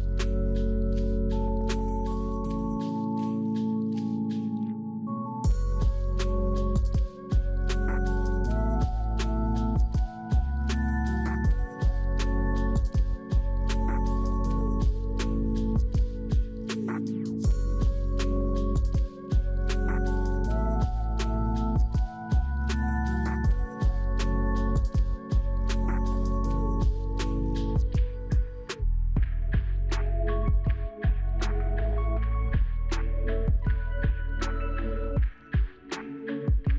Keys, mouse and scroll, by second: 16.2 scroll up 1, 17.3 scroll down 1, 17.8 scroll down 1, 32.9 middle click, 33.5 h, 33.9 l, 34.4 middle click, 34.7-36.7 scroll up 7.